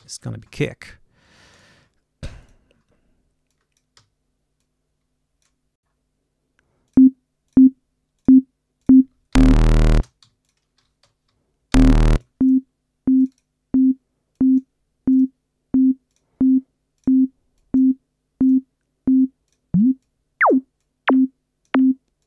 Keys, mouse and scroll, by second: 0.0-0.4 typing, 1.5 click, 2.4 click, 3.5 click, 3.9 d, 4.6 click, 5.8 scroll down 2, 6.8 click, 7.4 click, 8.1 click, 8.7 click, 9.2 h, 9.8 space, 10.3 click, 10.3 g, 11.6 l, 12.0-12.6 drag, 13.1 click, 14.2 click, 15.0 click, 16.0 click, 16.9 click, 17.5 click, 18.3 click, 19.4 click, 19.9 click, 20.7 click, 22.1 click.